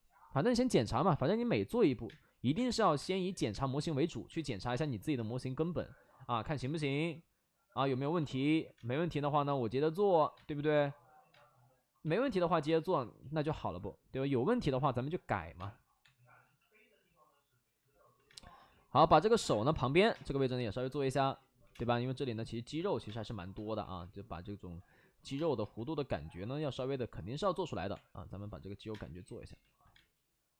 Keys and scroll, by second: 0.2 ctrl+z, 1.0 ctrl+z, 2.0-4.9 typing, 6.6 3, 8.7 space, 10.3 space, 11.2 space, 13.1 ctrl+z, 15.5 space, 15.9 3, 16.3 x, 18.2 space, 18.5 x, 20.1 space, 20.1 4, 20.1 5, 20.2 4, 21.1 ctrl+z, 21.5 5, 21.6 space, 23.0 space, 23.7 1, 25.1 ctrl+z, 25.3 space, 25.5 1, 26.5 ctrl+z, 27.8 3, 28.8 space, 29.9 space.